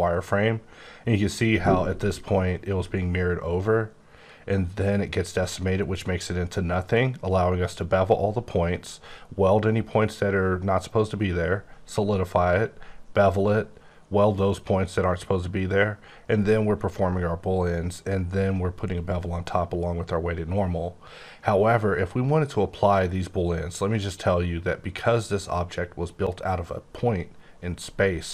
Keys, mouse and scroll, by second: 0.0-0.4 scroll down 4, 0.4 scroll up 2, 2.4 scroll, 3.5 scroll down 2, 4.2-6.4 scroll up 3, 6.8-8.4 scroll up 4, 8.4-9.3 scroll up 1, 9.3-10.2 scroll up 1, 11.1-12.3 scroll up 6, 12.3-13.5 scroll up 1, 13.5-14.6 scroll up 1, 15.4 scroll up 1, 16.4-17.6 scroll up 1, 17.6-18.4 scroll up 1, 18.4-19.1 scroll down 1, 19.1-19.6 scroll up 1, 19.6-20.0 scroll down 1, 21.4-22.1 scroll down 1, 22.1-22.7 scroll down 3, 22.8-24.6 scroll up 3, 24.6-25.8 scroll down 4, 25.8-28.2 scroll down 8.